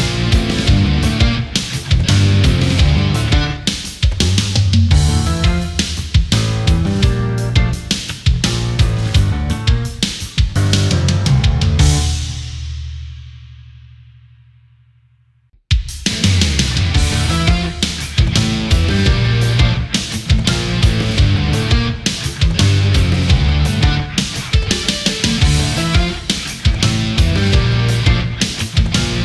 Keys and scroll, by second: 6.3 ctrl+=, 6.6 space, 18.6 space, 20.3 space, 24.9 Delete, 29.1 ctrl+z.